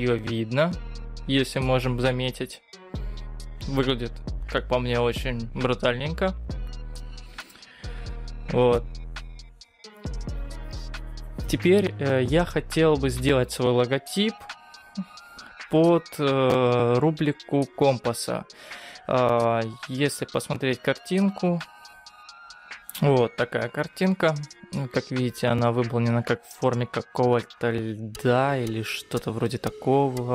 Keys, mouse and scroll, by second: 0.6-1.6 scroll up 10, 4.8-5.5 scroll down 4, 5.5 scroll down 2, 6.3-6.9 scroll down 4, 15.5-15.9 scroll down 3, 15.9-16.7 scroll up 3, 16.7-17.3 scroll up 2, 17.9-18.3 scroll up 3, 18.3-21.0 scroll down 2.